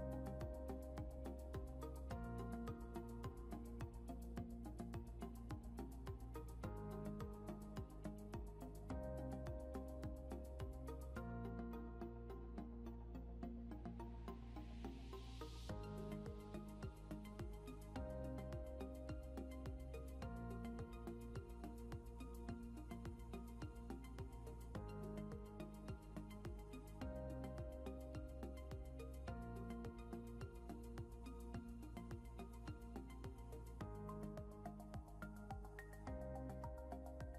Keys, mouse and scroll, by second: 8.4 typing, 9.9 typing, 19.8 ctrl+q, 26.7 scroll up 1, 27.9 scroll down 1, 30.2 scroll up 1, 35.9 ctrl+z, 36.8 scroll down 1.